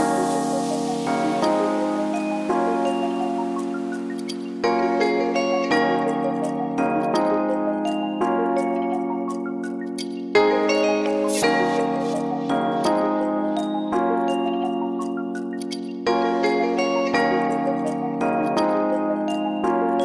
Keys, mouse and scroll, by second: 0.2 KP_1, 0.6 middle click, 1.9 click, 2.2 click, 4.4 click, 6.8 click, 7.2 click, 8.8 click, 9.2 click, 11.2 click, 12.2 click, 13.5 click, 13.9 click, 15.7 click, 16.0 click, 17.0 middle click, 17.9 click, 18.5 click.